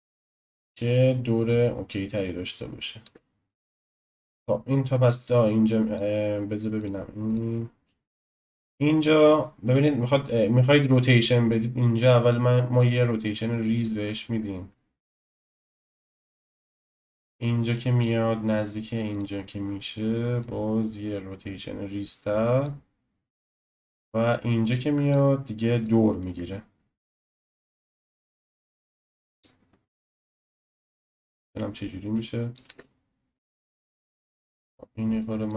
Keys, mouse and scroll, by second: 3.0 space, 3.5-8.5 drag, 8.5-12.8 shift+middle drag, 12.8 click, 16.6-20.5 drag, 23.6-25.8 drag, 25.8-27.3 shift+middle drag, 27.3 click, 31.4-32.6 drag, 32.6 space, 33.7 space, 34.0-34.8 drag.